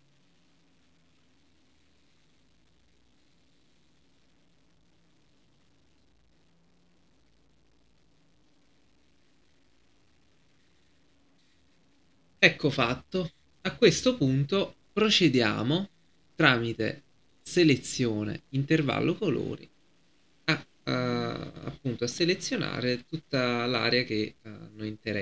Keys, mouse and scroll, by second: 5.5 right click, 6.3-25.2 drag.